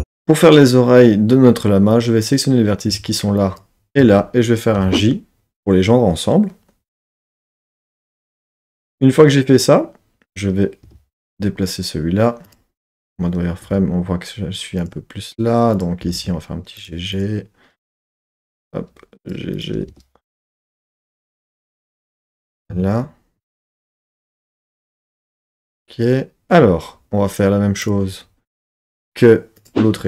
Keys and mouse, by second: 0.0 z, 1.9 click, 3.4 shift+click, 4.0-6.2 drag, 4.8 j, 7.2 Tab, 7.7 Tab, 10.3 click, 10.8 g, 11.2 g, 12.4 click, 12.9 z, 13.7 g, 14.8 click, 15.7 click, 16.0 g, 16.2 g, 16.8 click, 17.2 click, 17.8 click, 18.2 g, 18.4 g, 19.5 click, 19.8 g, 19.9 g, 20.4 click, 20.8 click, 21.1 g, 22.0 click, 27.8 click, 29.6-30.0 drag.